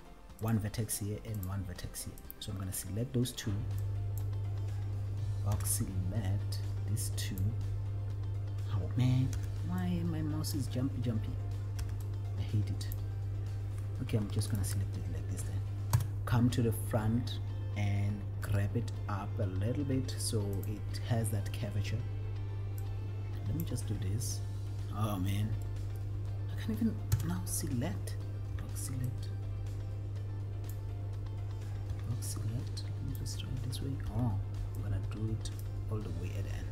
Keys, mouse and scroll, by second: 0.7 click, 1.8 click, 2.5 click, 4.2 click, 5.8 b, 7.7 click, 9.5 b, 10.9 click, 12.1 b, 13.1 click, 14.7 shift+click, 16.2 KP_1, 18.6 g, 20.9 click, 22.9-24.0 drag, 25.8 middle click, 27.4 KP_1, 28.8 b, 30.9 click, 32.2 b, 34.4 b.